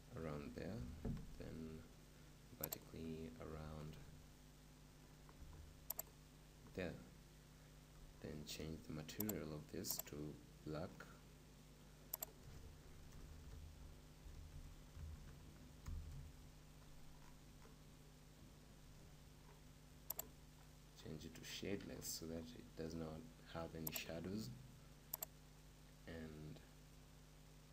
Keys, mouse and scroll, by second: 0.7 s, 2.8-4.8 drag, 3.5 s, 6.1-16.2 drag, 16.2 BackSpace, 20.1-26.2 drag.